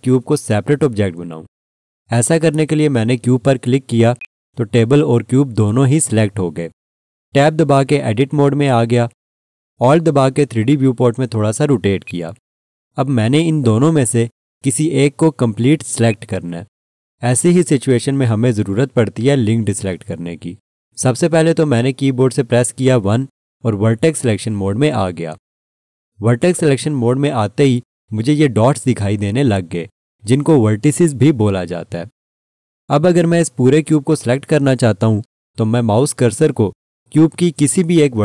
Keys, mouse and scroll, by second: 4.2 click, 8.2 Tab, 12.0 alt+click, 13.4-16.1 scroll down 1, 16.1 click, 23.8 1, 26.4-28.0 scroll up 1.